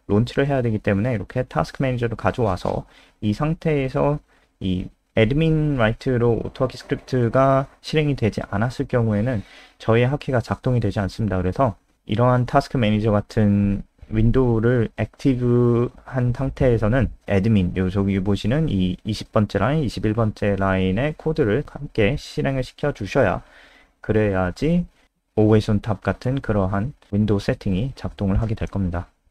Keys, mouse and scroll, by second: 0.0-0.6 typing.